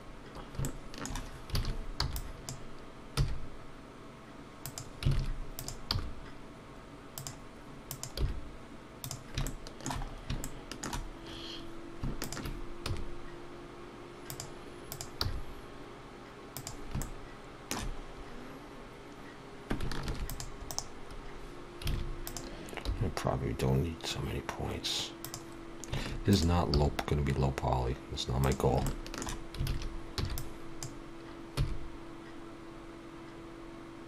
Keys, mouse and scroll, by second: 0.6 shift+middle click, 1.5 alt+a, 4.7 e, 5.1 alt+a, 5.6 click, 5.9 g, 7.9 click, 8.2 g, 9.5 shift+middle click, 10.1 scroll up 2, 10.1 g, 10.4 shift+middle click, 12.2 shift+click, 12.8 e, 14.9 click, 15.2 g, 17.0 shift+middle click, 18.1 scroll up 1, 20.1 ctrl+r, 21.9 alt+a, 22.2 click, 22.8 g, 26.3 click, 26.7 g, 28.8 shift+middle click.